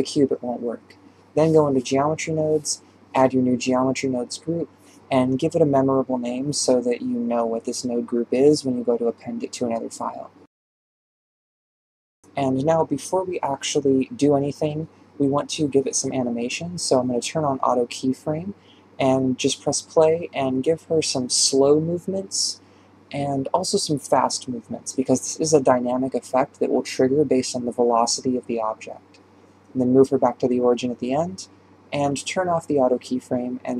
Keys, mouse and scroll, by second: 0.0 click, 2.8-11.0 drag, 19.0-20.9 drag, 20.9 shift+space, 21.2 g.